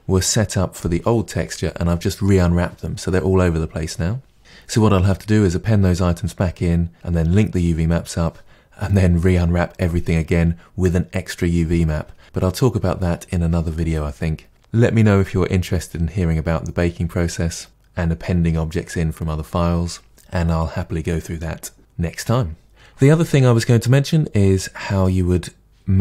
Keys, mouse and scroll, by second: 22.6-24.9 scroll down 1, 24.9 click.